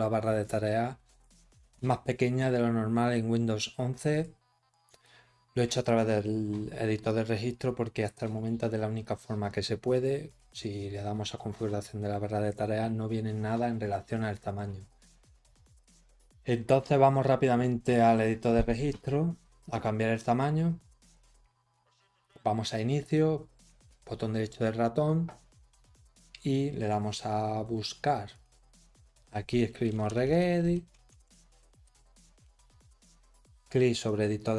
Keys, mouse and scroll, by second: 0.4 click, 4.1 click, 4.9 click, 8.3 right click, 10.2 click, 13.9 scroll down 2, 14.8 click, 15.6 click, 17.9 click, 22.8 right click, 28.3 click, 29.9-31.7 typing, 34.0 click.